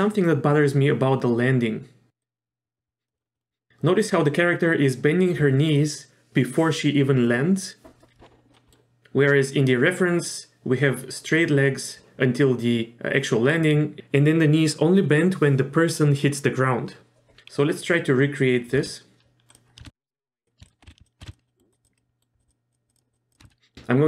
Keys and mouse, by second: 2.2-3.1 drag, 3.1 middle drag, 3.3 middle click, 8.6 middle click, 18.7 z, 20.1 click, 20.6 shift+drag, 20.9 ctrl+z, 21.0 shift+click, 21.3 shift+click, 21.5 shift+middle click, 21.7 shift+click, 22.0 shift+middle click, 22.4 shift+click, 22.9 shift+click, 23.1 shift+click, 23.3 shift+click, 23.4 ctrl+click.